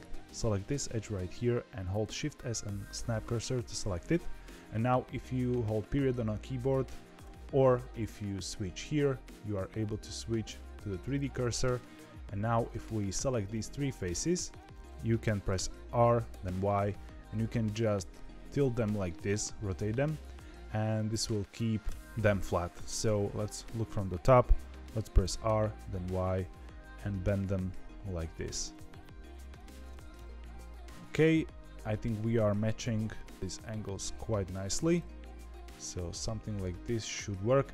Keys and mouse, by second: 2.0 shift+s, 9.7-11.1 drag, 12.3 3, 12.8 click, 14.6 middle click, 15.4 r, 23.0 KP_7, 25.2 r, 30.1 KP_1, 32.8 r.